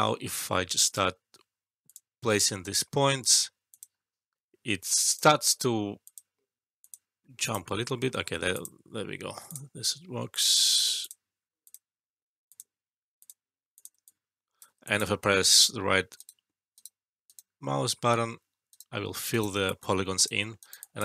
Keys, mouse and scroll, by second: 0.8 click, 4.7 ctrl+z, 5.0-7.4 drag, 7.8 alt+middle click, 8.5 click, 14.0-14.6 alt+click, 16.1 right click, 19.6-20.2 alt+click, 20.4 alt+middle click, 20.5 alt+right click, 20.8 alt+click.